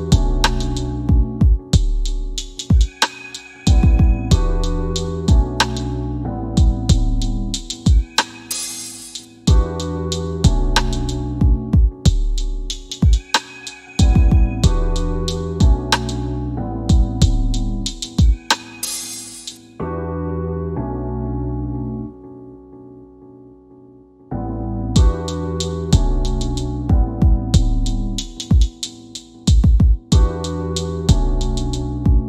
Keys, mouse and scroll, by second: 0.1 middle click, 1.6 scroll down 1, 3.4 click, 5.2 scroll up 1, 8.3 scroll down 1, 9.7 middle click, 12.2 scroll down 1, 12.9 click, 15.2 scroll up 1, 15.9 m, 17.9 click, 22.1 click, 25.8-27.2 typing, 28.4-29.2 typing, 29.6 click, 30.7-32.1 scroll down 1, 32.1 click.